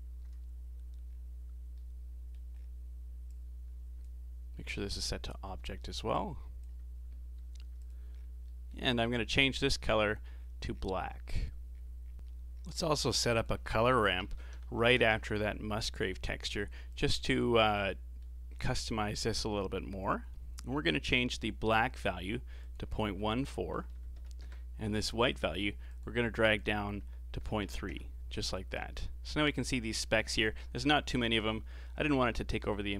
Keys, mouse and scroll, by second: 1.1-1.8 scroll down 3, 1.8 middle click, 2.6 scroll up 4, 3.3 click, 5.0 click, 6.1 click, 7.3 g, 8.2 scroll up 5, 8.4 middle click, 8.9 scroll up 4, 9.5 click, 12.1-12.8 scroll down 8, 12.8 middle click, 13.1 shift+a, 14.8 r, 17.8-18.7 middle drag, 18.7-20.0 scroll up 4, 21.6-22.6 scroll up 3, 22.6-25.6 drag, 25.9-29.5 drag, 30.5 scroll down 5, 31.5-32.1 scroll down 7, 32.3-32.9 middle drag.